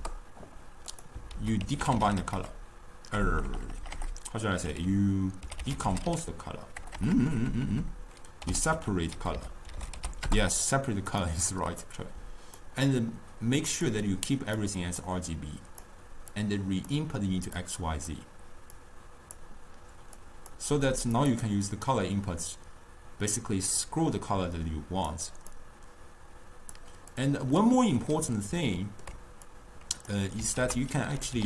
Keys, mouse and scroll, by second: 1.4 ctrl+a, 3.4 BackSpace, 3.5 BackSpace, 3.8 BackSpace, 4.0 BackSpace, 7.0 BackSpace, 7.2 BackSpace, 7.5 BackSpace, 7.7 BackSpace, 11.9 click, 13.2 click, 14.7 click, 15.4 click, 16.4-17.7 drag, 18.9 drag, 20.3 click, 21.2 click, 27.2 click, 27.7-29.6 middle drag, 29.6 click, 30.7 ctrl+a.